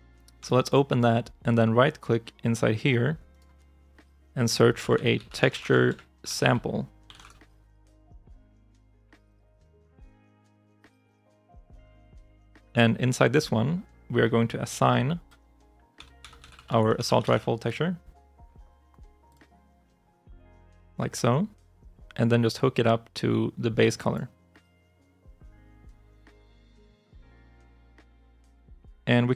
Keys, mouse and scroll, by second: 3.1 right click, 4.4-7.6 typing, 12.4 right click, 15.6-17.7 typing, 29.1 right click.